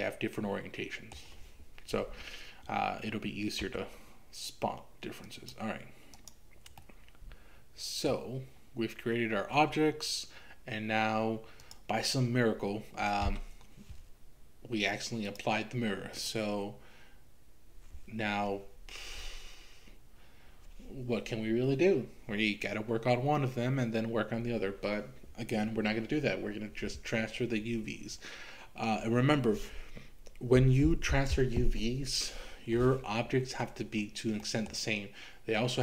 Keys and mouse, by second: 3.7 Tab, 6.8-8.1 middle drag, 9.6 Tab, 15.4 click, 34.4 middle click.